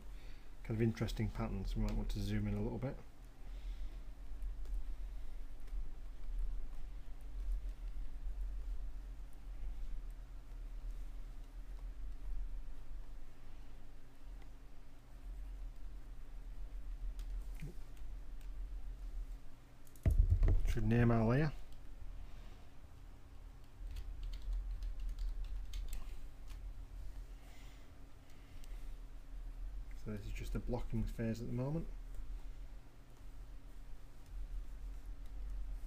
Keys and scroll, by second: 0.5 ], 23.6-26.2 typing, 28.3 Return, 34.2 [.